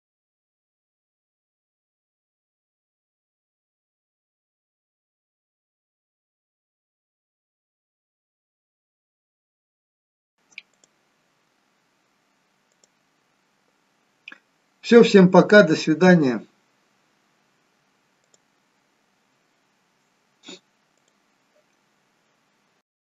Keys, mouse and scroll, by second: 1.6 click, 2.3 click, 3.5 middle click, 3.9 scroll up 4, 4.1 middle click, 8.2 scroll down 2, 8.4 middle click, 9.1 scroll up 1, 9.3 middle click, 10.6 click, 11.4-13.5 scroll up 2, 13.5 click.